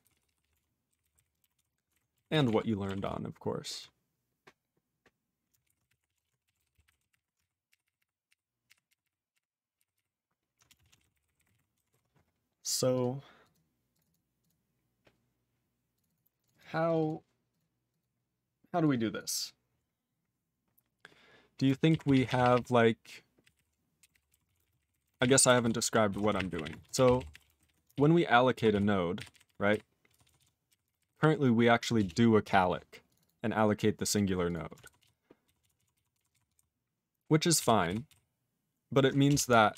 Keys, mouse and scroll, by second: 0.0 ctrl+s, 0.1 ctrl+p, 0.3 ctrl+p, 0.4 ctrl+p, 0.5 ctrl+f, 0.9 ctrl+n, 1.0 ctrl+n, 1.1 ctrl+n, 1.6 ctrl+s, 1.9 ctrl+alt+b, 2.3 ctrl+s, 2.5 ctrl+alt+f, 3.0 ctrl+s, 5.6-7.7 typing, 7.8 ctrl+r, 8.0 ctrl+r, 8.3 ctrl+r, 8.7 ctrl+r, 8.9 ctrl+r, 9.0 ctrl+r, 9.3 ctrl+r, 9.8 ctrl+r, 10.0 ctrl+r, 10.7 Return, 10.8 ctrl+a, 10.9 ctrl+space, 11.0 ctrl+e, 11.0 ctrl+n, 11.1 ctrl+n, 11.2 ctrl+n, 11.4 ctrl+n, 11.4 ctrl+g, 11.5 ctrl+e, 11.9 ctrl+s, 12.9 click, 13.0 click, 13.5 click, 13.5 click, 13.9 click, 14.0 click, 14.0 double click, 14.1 double click, 14.4 click, 14.4 click, 15.9 click, 16.0 click, 16.1 click, 16.1 click, 16.4 click, 16.4 click, 16.5 double click, 16.6 double click, 16.8 click, 16.9 click, 17.0 double click, 17.0 double click, 17.5 click, 17.6 click, 17.9 click, 18.0 click, 18.5 click, 18.8 click, 19.2 click, 19.3 click, 19.4 click, 19.9 click, 22.1 ctrl+s, 22.1 ctrl+p, 22.3 ctrl+a, 22.4 ctrl+p, 22.5 ctrl+p, 23.4 ctrl+o, 23.5 ctrl+o, 24.0 ctrl+k, 24.1 ctrl+k, 24.5 ctrl+s, 24.6 ctrl+space, 24.6 ctrl+e, 24.7 ctrl+n, 24.8 ctrl+n, 24.9 ctrl+n, 25.0 ctrl+n, 25.2 ctrl+g, 25.2 ctrl+e, 25.6 ctrl+s, 26.1-28.2 typing, 28.6 ctrl+s, 29.2 ctrl+r, 29.4 ctrl+r, 29.5 ctrl+r, 29.7 ctrl+r, 30.1 ctrl+s, 30.3 ctrl+s, 30.4 ctrl+s, 30.7 ctrl+r, 30.8 ctrl+r, 31.0 ctrl+r, 31.1 ctrl+r, 32.0 Return, 33.1 click, 33.1 click, 33.2 double click, 33.2 double click, 33.8 click, 34.1 click, 34.5 click, 34.5 click, 34.8 ctrl+s, 35.5 ctrl+s, 35.6 ctrl+s, 35.8 ctrl+s, 35.9 ctrl+s, 36.2 ctrl+s, 36.4 ctrl+s, 36.6 ctrl+s, 37.6 ctrl+s, 37.9 ctrl+s, 38.1 ctrl+s, 39.3 Return.